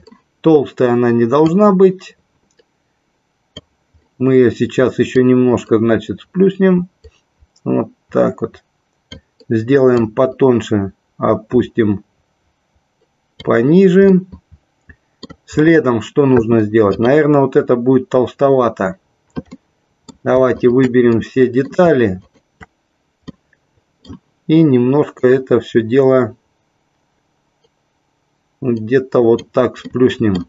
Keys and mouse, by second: 1.6-3.7 drag, 5.2-9.2 drag, 10.2-13.6 drag, 14.3-15.5 middle drag, 17.1 click, 19.8 middle click, 20.7 shift+click, 21.3 middle click, 22.3 shift+click, 23.5 middle click, 25.2-29.6 drag, 30.1 middle click.